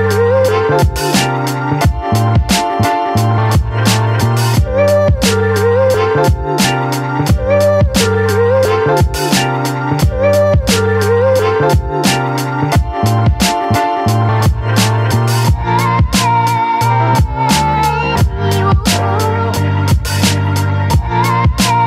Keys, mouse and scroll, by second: 1.7 5, 2.3 0, 3.0 click, 4.5-5.7 typing, 5.8-9.0 drag, 9.9-15.8 drag, 19.3 click, 20.6 click.